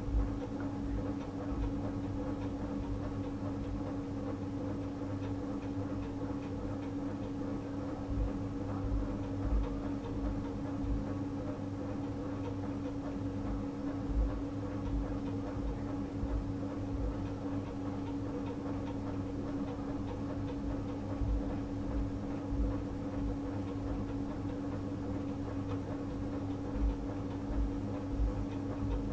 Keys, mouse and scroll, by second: 3.7 click, 8.8 click, 13.6 click, 24.5 click.